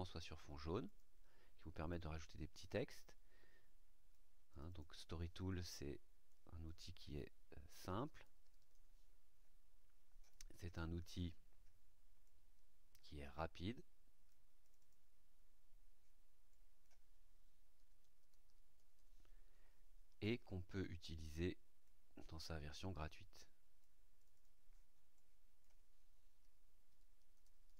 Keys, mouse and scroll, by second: 0.8 click, 1.8-4.3 drag, 4.4 click, 6.2 click, 7.6-8.7 typing, 11.1 click, 12.2-14.4 drag, 14.6 click, 16.4 click, 17.7-18.9 typing, 20.6 click, 21.8-23.9 drag, 24.1 click, 25.1 click, 26.3-27.6 typing.